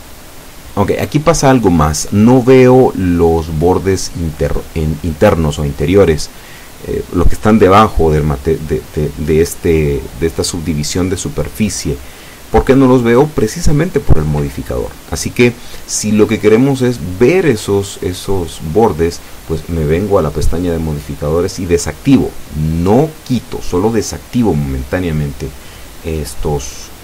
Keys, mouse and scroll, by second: 1.4 click, 3.0 click, 4.0 alt+shift+right click, 5.1 alt+shift+right click, 5.7 alt+shift+right click, 6.5 alt+shift+middle click, 9.9-11.2 alt+shift+middle drag, 11.3 z, 12.1 z, 12.6-14.7 middle drag, 15.4 middle click, 16.4 alt+shift+right click, 17.4 alt+shift+middle click, 18.5 alt+shift+right click, 19.3 alt+shift+right click, 20.1 alt+shift+right click, 20.6 alt+shift+right click, 21.3 alt+shift+right click, 22.3-22.7 alt+shift+scroll down 1, 22.7-23.9 drag, 24.5 scroll down 2, 24.9-26.0 drag, 26.7-27.0 middle drag.